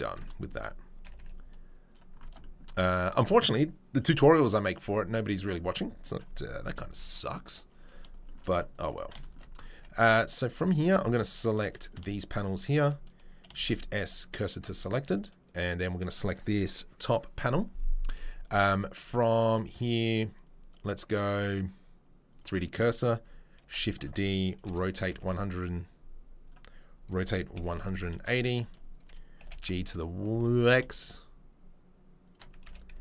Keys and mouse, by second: 1.0 g, 2.2 Tab, 5.4 right click, 5.5-10.0 middle drag, 6.7 KP_3, 7.0 KP_1, 10.0-10.4 drag, 10.4 Tab, 10.4-11.8 middle drag, 11.6 3, 11.8 click, 11.9 shift+middle click, 12.1 shift+click, 12.4-29.4 shift+middle drag, 13.6 shift+s, 14.5 Tab, 20.1-32.3 drag, 23.6 shift+d, 24.6 r, 27.1 r, 29.4 g, 32.3-33.0 shift+middle drag, 32.6 s.